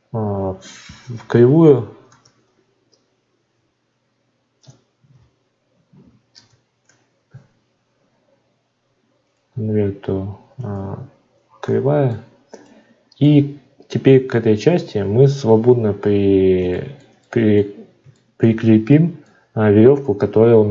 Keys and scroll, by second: 4.6 BackSpace, 5.1 n.